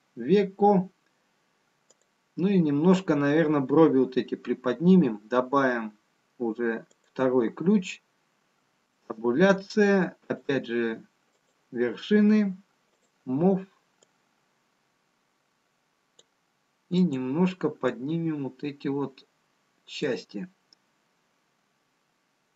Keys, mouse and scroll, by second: 4.3 click, 7.5 click, 9.1 Tab, 10.9 click, 12.5 click, 13.8 click, 15.2 click, 18.2 click.